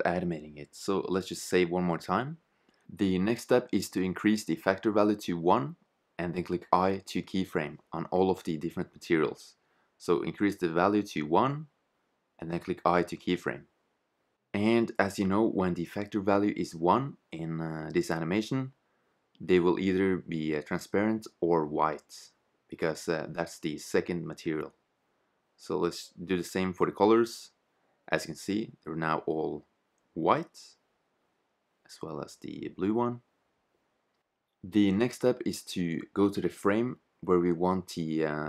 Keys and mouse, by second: 2.7-4.6 right drag, 5.3 i, 7.2-10.2 drag, 8.4 right click, 9.6 i, 13.3 i, 16.8 i, 20.0 i, 23.7 i, 27.0 i, 29.2 click, 30.1 i, 34.6 click, 34.6 i.